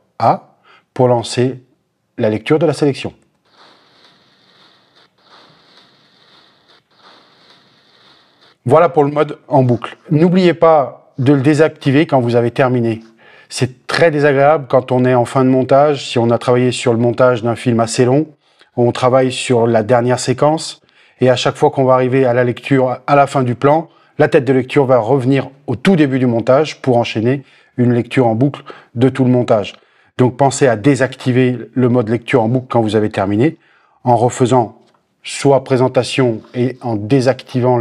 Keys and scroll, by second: 3.2 shift+,, 8.5 space.